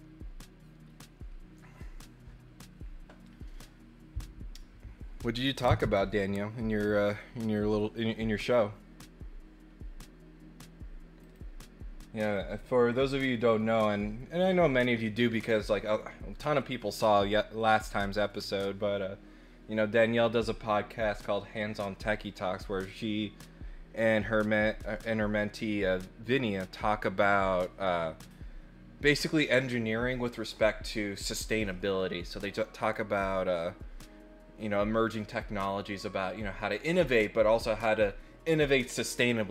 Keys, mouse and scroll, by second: 11.2 click, 12.2 click, 12.6 middle click.